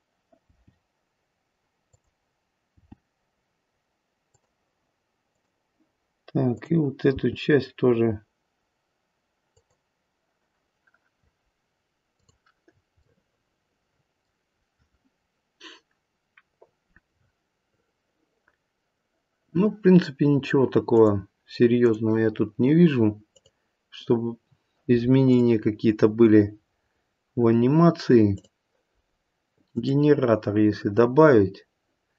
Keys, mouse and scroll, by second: 0.4 g, 4.3 g, 5.3 click, 6.5 click, 7.0 g, 12.1 click, 12.6-13.0 scroll down 2, 13.0 middle click, 20.9 click, 21.8 click, 23.3 click, 25.3 click, 28.3 click.